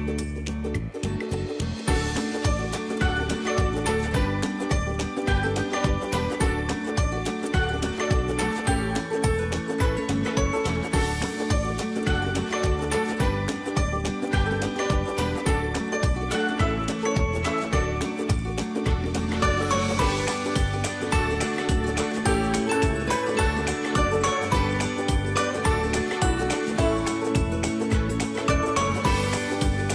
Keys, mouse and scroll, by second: 0.3-4.2 drag, 4.2 space, 4.5 click, 4.7 space, 6.0 click, 7.0 space, 7.3 click, 7.4 click, 10.1-13.5 ctrl+drag, 13.5 space, 13.6 click, 14.0 space, 15.0-16.3 drag, 16.3 space, 16.5 click, 16.8 space, 17.7-18.9 drag, 18.9 space, 19.2 click, 20.3 alt+click, 22.9 Return, 23.8 space, 24.1 click, 24.3 space, 26.2-29.9 drag.